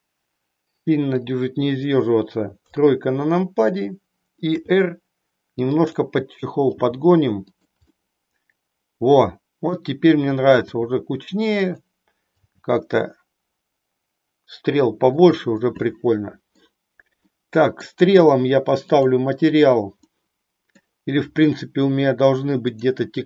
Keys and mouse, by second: 2.6 KP_3, 4.5 r, 6.8 g, 7.7 click, 8.0-9.8 middle drag, 10.6 r, 12.5 g, 15.3 click, 15.7-16.7 middle drag, 17.3 middle click, 20.1 middle click.